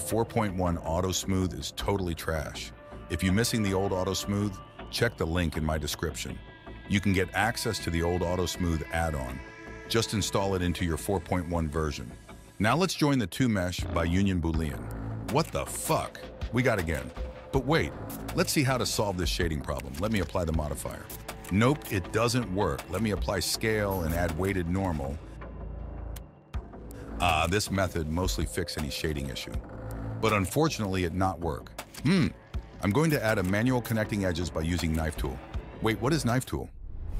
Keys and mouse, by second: 0.9 middle click, 2.8 click, 4.0 g, 8.8 shift+middle click, 10.7 click, 11.9 shift+click, 14.5 ctrl+shift+b, 15.6 middle click, 17.1 click, 18.0 click, 19.1 click, 22.9 ctrl+z, 23.0 ctrl+a, 23.3-25.5 drag, 26.6 click, 28.1 click, 29.2 click, 30.5 click, 30.9 Tab, 31.2 Tab, 32.2 click, 32.7 click, 34.0 click, 34.7 click, 35.2 Tab, 36.0 click.